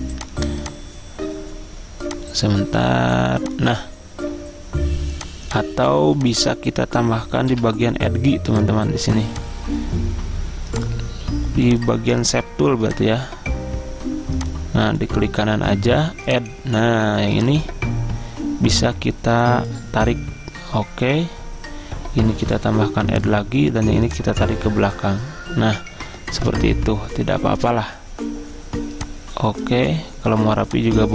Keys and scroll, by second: 7.6 Delete.